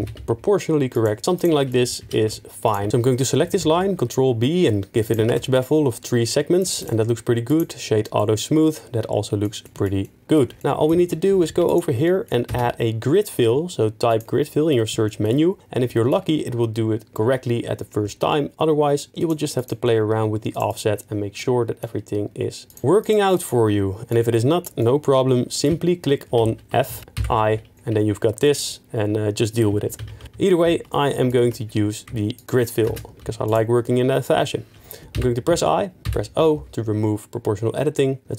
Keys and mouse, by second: 0.0 g, 0.1 z, 1.3 click, 2.0 2, 2.6 alt+click, 2.9 ctrl+b, 3.6 ctrl+b, 5.0 click, 5.3 Tab, 6.8 right click, 11.0 Tab, 11.3 2, 12.0 middle click, 12.5 space, 15.0 shift+middle click, 15.3 middle click, 15.9 shift+middle click, 19.2 click, 20.5 click, 20.7 click, 23.0 click, 23.4 click, 26.4 ctrl+z, 26.9 f, 27.2 i, 28.4 middle click, 30.0 ctrl+z, 30.2 ctrl+z, 30.6 ctrl+z, 31.1 click, 31.4 Tab, 33.0 space, 35.1 i, 36.0 s, 36.5 s, 36.5 o.